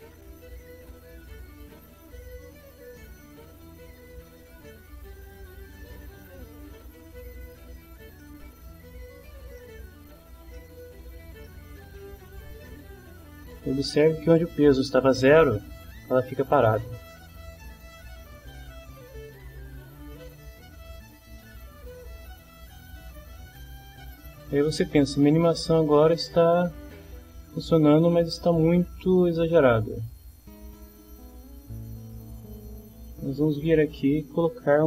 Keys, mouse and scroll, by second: 0.6-2.1 drag, 3.7-5.2 drag, 7.4 click, 8.2 middle click, 9.6 click, 10.6 ctrl+click, 11.4-12.6 ctrl+drag, 17.6-22.4 drag, 22.7-25.2 drag, 25.4 click, 29.1-31.8 middle drag, 32.8 click.